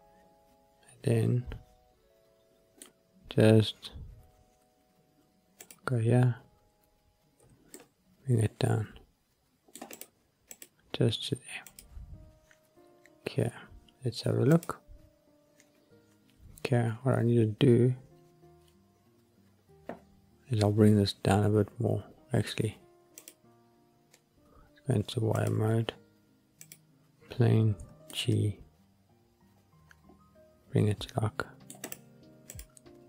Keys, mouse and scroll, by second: 3.0-5.5 scroll up 1, 5.5 click, 7.3 g, 7.7 middle click, 9.7 scroll up 1, 9.8 click, 10.4 click, 11.5 click, 13.0-15.0 scroll up 2, 15.0 click, 23.1 click, 25.3 click, 26.5 click, 27.7 g, 28.0 middle click, 31.8 click, 32.4 click.